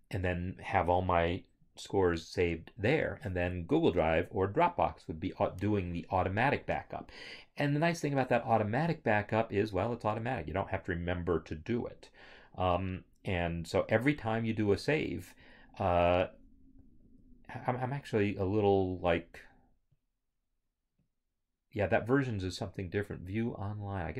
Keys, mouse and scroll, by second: 15.7 click, 17.0 click, 17.1 alt+Tab, 21.1 right click.